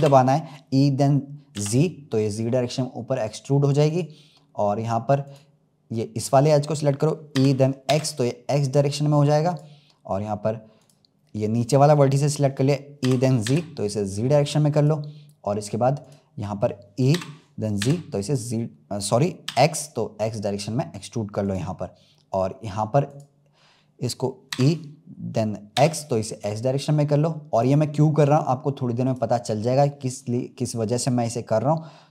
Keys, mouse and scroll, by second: 5.2-7.2 drag, 7.2 e, 10.7 click, 13.0 e, 16.0-17.0 drag, 17.0 e, 23.0 click, 24.4 e, 29.0 click.